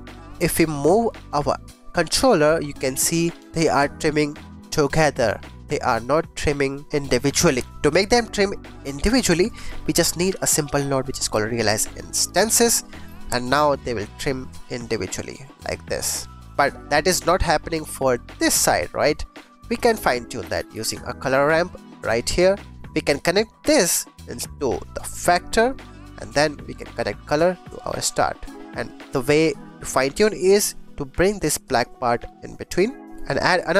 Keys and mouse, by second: 0.3 g, 0.4 x, 3.5 g, 7.8 click, 8.9 click, 9.0 click, 9.2 middle click, 9.5 shift+a, 12.2 click, 13.0 g, 13.0 x, 17.9 click, 19.3 click, 19.6 shift+a, 22.3 click, 23.1-25.6 drag, 26.5-27.8 drag, 28.6 click, 29.7 click, 31.7-33.1 drag, 33.3 click.